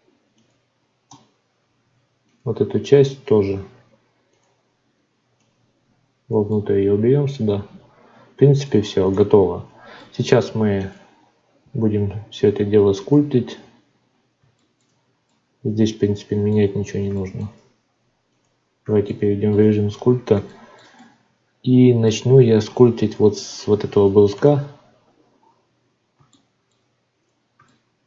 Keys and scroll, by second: 1.0 Tab, 9.0 Tab, 11.9 ctrl+s.